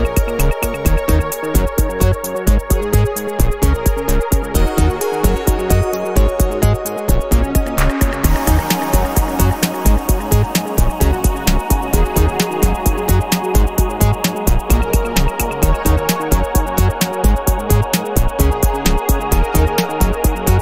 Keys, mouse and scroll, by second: 0.7-1.7 middle drag, 2.7 click, 3.3 click, 4.9-8.9 drag, 9.0 click, 10.0 click, 10.3 click, 10.7-14.8 middle drag, 16.1 ctrl+z, 17.7 ctrl+z, 19.1 ctrl+z.